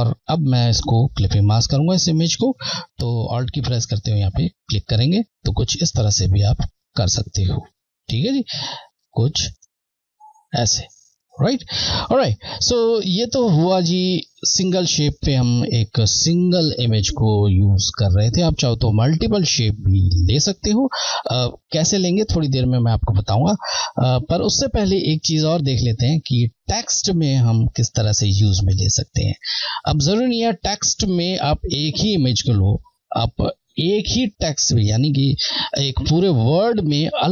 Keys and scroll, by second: 4.8 Left, 13.8 Left.